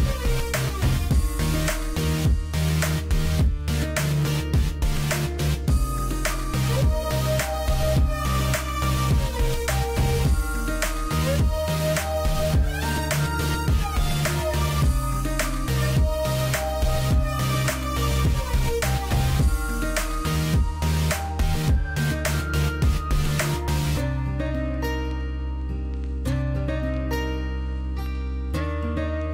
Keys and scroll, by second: 7.3 space, 20.6 space, 22.6 space.